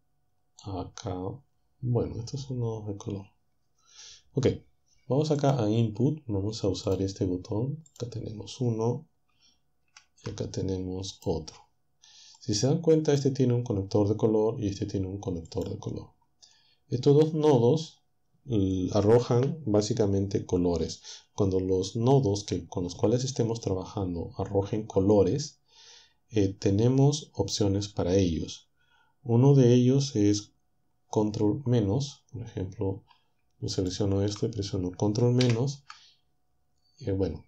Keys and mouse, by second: 5.4 click, 6.9 click, 7.9 click, 9.8 shift+d, 11.1 click, 12.4 click, 15.5 click, 33.8 shift+click, 35.4 ctrl+-.